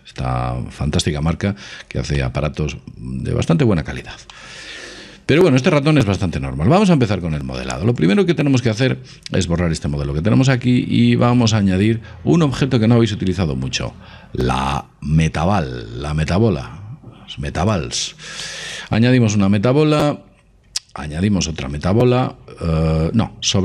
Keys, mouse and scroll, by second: 4.3-6.2 middle drag, 7.5 x, 11.2 shift+a, 18.4-20.2 middle drag, 21.7 shift+a.